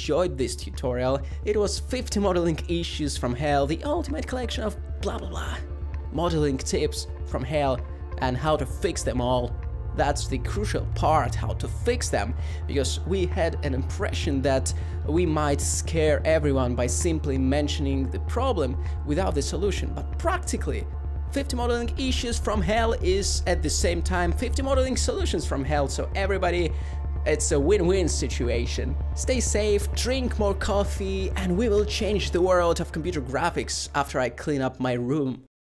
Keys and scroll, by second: 4.0 Tab, 4.7 3, 5.1 g, 11.3-12.9 typing, 13.9 Tab, 15.2 typing, 16.5 ctrl+-, 18.5 ;, 19.7 ;, 30.9 g, 31.8 F12, 33.3 2.